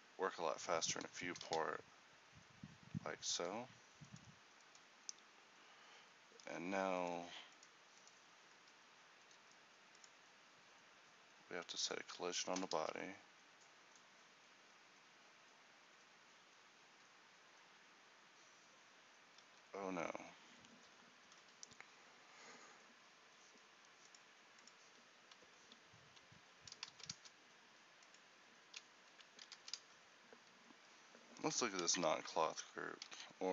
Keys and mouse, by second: 1.0 Escape, 1.5 alt+a, 3.5 Escape, 7.0-12.8 middle drag, 12.8 alt+a, 19.8 Escape, 32.0 ctrl+t.